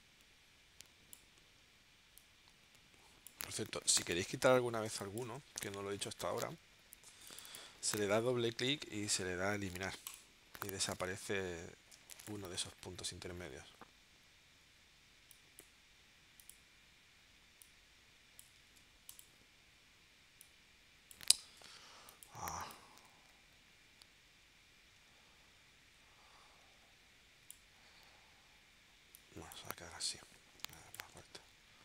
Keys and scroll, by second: 4.1 super+z, 4.8 space, 5.9 space, 12.0 space, 18.7 super+z, 21.4 super+z, 30.6 space.